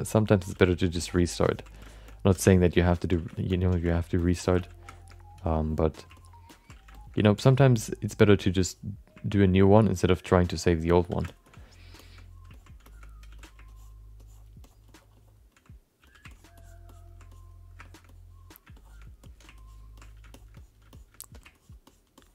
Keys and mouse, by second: 0.5 f, 1.0 click, 1.4 click, 1.8 alt+shift+middle click, 2.0 alt+middle click, 2.5 click, 3.3 alt+shift+middle click, 3.5 middle click, 3.9 ctrl+click, 4.2 ctrl+click, 4.5 f, 4.9 alt+shift+middle click, 5.4 click, 6.1 ctrl+click, 6.5 ctrl+click, 6.9 alt+shift+middle click, 7.1 alt+middle click, 7.5 ctrl+click, 7.8 ctrl+click, 8.4 click, 9.4 ctrl+click, 10.6 click, 10.9 click, 11.2 alt+shift+middle click, 11.4 alt+middle click, 12.0 shift+middle click, 12.1 alt+middle click, 12.5 ctrl+middle click, 12.8 shift+middle click, 13.3 f, 13.6 ctrl+click, 14.2 ctrl+click, 14.6 click, 15.2 click, 15.5 click, 16.0 f, 16.3 click, 16.6 click, 16.9 click, 17.3 click, 17.8 alt+shift+middle click, 18.0 alt+middle click, 18.7 alt+shift+middle click, 19.2 alt+middle click, 19.5 ctrl+click, 20.0 click, 20.3 shift+middle click, 20.5 alt+middle click, 20.9 alt+shift+middle click, 21.5 ctrl+click, 21.8 ctrl+click, 22.2 ctrl+click.